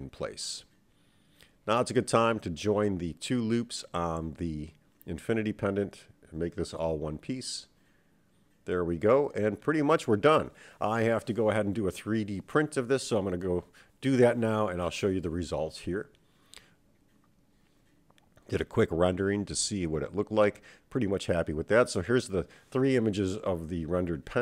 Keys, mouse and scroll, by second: 0.1-1.0 scroll down 2, 1.7 click, 3.1 shift+click, 5.2 shift+click, 6.6-7.3 drag, 8.1-9.2 scroll up 3, 9.2 click.